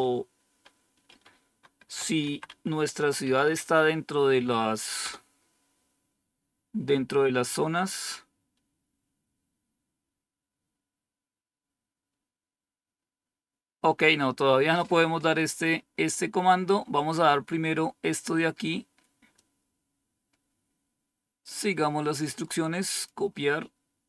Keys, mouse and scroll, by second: 1.4-3.9 typing, 4.9 typing, 16.0 scroll up 1, 16.7-17.7 scroll up 1, 17.7 scroll up 1, 19.3-21.5 drag, 22.3 right click, 22.8 click, 23.3 click.